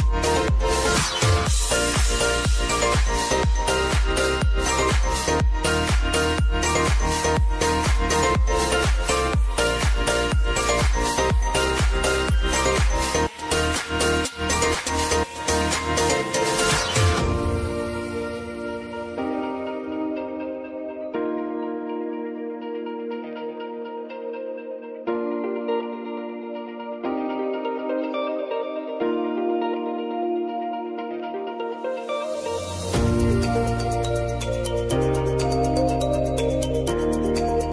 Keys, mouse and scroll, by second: 8.1 =, 9.4 click, 11.5 Return, 12.8 j, 14.0 click, 18.1 Return, 19.1 click, 20.0 F9, 20.9-25.1 drag, 25.1-26.9 drag, 26.9 click, 28.9 space, 31.2-32.8 drag, 34.4 ctrl+c, 35.1 click, 36.7 ctrl+v.